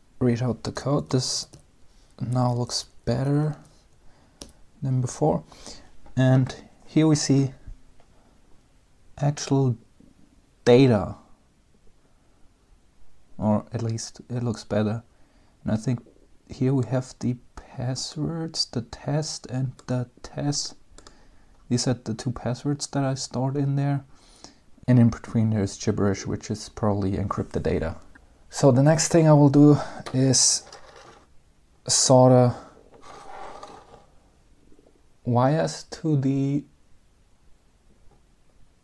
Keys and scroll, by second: 1.2-4.7 typing, 5.1 Return.